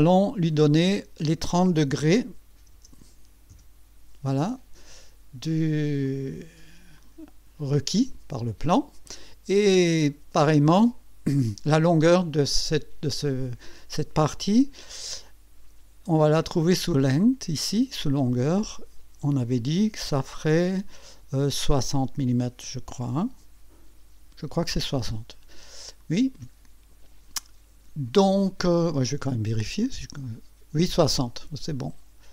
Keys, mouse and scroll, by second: 0.8 click, 2.5 KP_3, 3.5 KP_Enter, 6.0 click, 7.0 click, 8.4 click, 9.8 click, 10.6 click, 18.2 click, 21.9 KP_6, 23.1 KP_0, 24.2 KP_Enter, 26.0 click, 27.3-28.4 right drag, 29.6 click, 31.4 click.